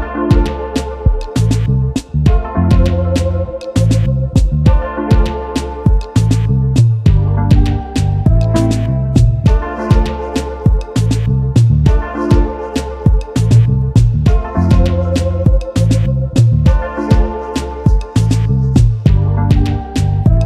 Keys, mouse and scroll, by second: 8.1 ctrl+2, 9.1-9.6 alt+scroll down 1, 9.6 alt+scroll up 1, 10.2 space, 11.3-11.7 scroll down 1, 11.8-12.4 alt+scroll down 1, 13.8-14.4 alt+scroll up 1, 14.9 double click, 15.3 alt+scroll up 1, 15.9 alt+scroll down 1, 17.0 double click.